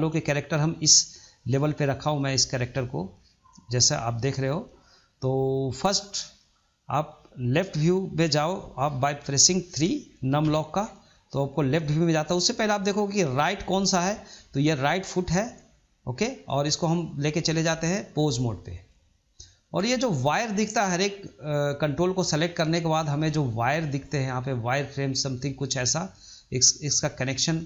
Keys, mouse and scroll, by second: 0.0-2.6 middle drag.